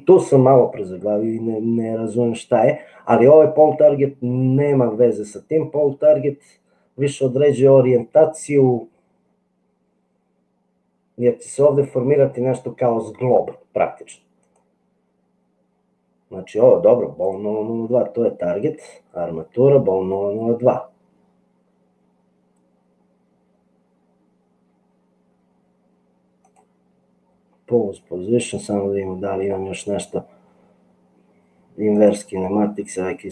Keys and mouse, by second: 31.9 click.